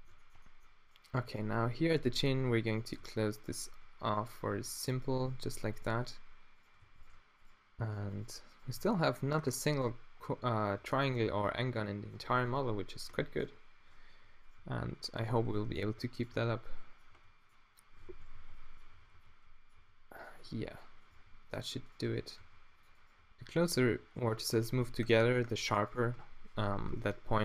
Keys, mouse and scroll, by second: 1.5 g, 2.0 a, 2.2 b, 3.0 f, 4.0 a, 4.5 ctrl+r, 6.9 f, 8.8 f, 9.0-10.2 drag, 10.2 Tab, 10.8 Tab, 14.1-21.1 typing, 22.5 g, 23.1 g, 23.9 g, 24.6 Tab, 24.9 z.